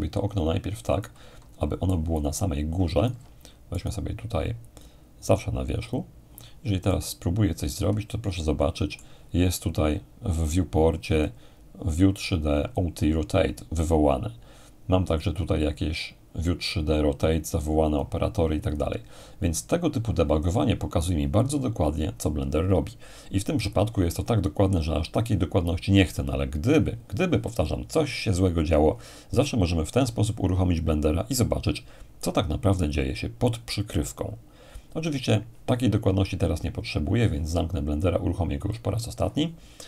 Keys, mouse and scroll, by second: 1.9-4.8 alt+right drag, 5.8-6.9 drag, 6.9-10.0 middle drag, 11.2-13.7 drag, 16.7-19.7 drag, 38.6-39.7 drag.